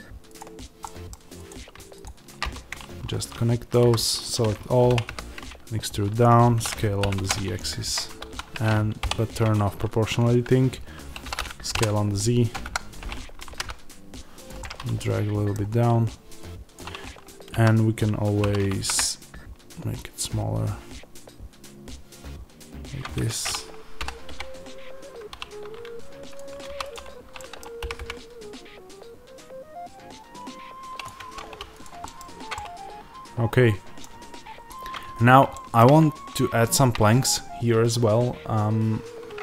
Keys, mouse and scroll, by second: 0.3 click, 0.8 middle click, 1.4 click, 2.3 f, 2.6-8.1 middle drag, 3.7 a, 8.1 ctrl+z, 8.9 o, 11.7 KP_Enter, 12.6 KP_1, 13.4 g, 14.5-16.6 middle drag, 16.6 click, 17.4 a, 23.2 Escape, 23.9 s, 26.6 3, 26.7 click, 27.3-31.0 middle drag, 27.7 g, 31.0 click, 31.1 Tab, 31.7 click, 31.9-39.4 middle drag, 32.1-32.5 scroll down 1, 34.3-35.1 scroll up 1, 35.1 scroll down 1.